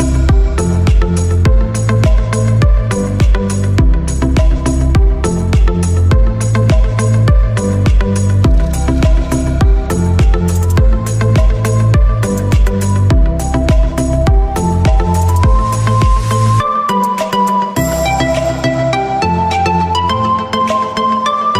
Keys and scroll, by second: 3.2 v, 5.0 ctrl+z, 6.7 ctrl+t, 15.3 ctrl+t, 19.7 ctrl+t.